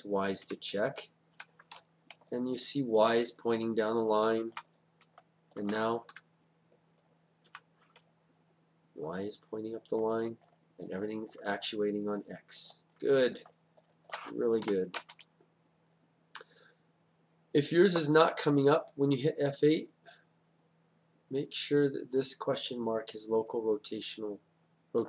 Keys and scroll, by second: 0.4 F8, 6.1 F8, 14.7 F8.